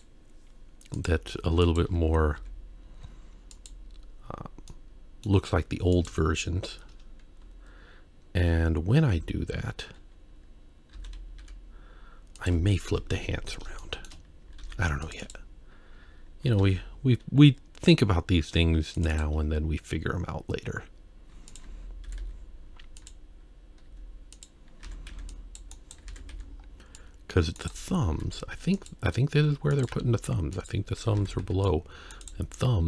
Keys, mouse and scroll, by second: 0.9 click, 2.4 z, 4.3 scroll down 1, 4.7-5.3 middle drag, 5.5-5.9 scroll up 1, 5.9 click, 8.4 ctrl+3, 9.2 Tab, 9.7-10.7 scroll up 1, 10.7 scroll up 1, 10.9 s, 12.9 KP_1, 13.5-13.8 scroll up 2, 13.8 shift+middle click, 14.6 ctrl+r, 16.6 ctrl+r, 21.5 alt+click, 22.0 g, 23.8 z, 24.8 alt+a, 25.1 c, 26.1 alt+a, 26.3 c, 28.8 e, 29.3 s, 30.6 g, 31.2 alt+a, 31.4 c.